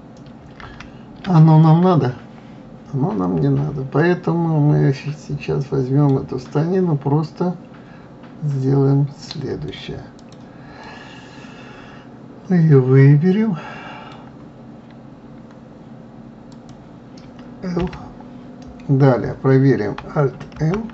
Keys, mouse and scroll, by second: 0.1 ctrl+z, 1.0 ctrl+z, 2.0-5.2 middle drag, 6.8-9.9 middle drag, 10.6 click, 11.2 scroll up 1, 11.2-14.3 middle drag, 16.9 click, 18.2 l.